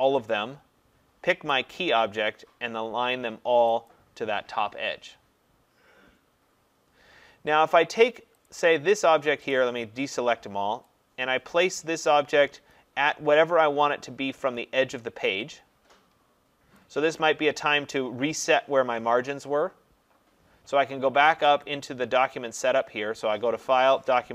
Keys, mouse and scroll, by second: 1.5 click, 3.9 click, 8.5 click, 9.5 click, 16.8 click, 21.6 click, 23.7 click.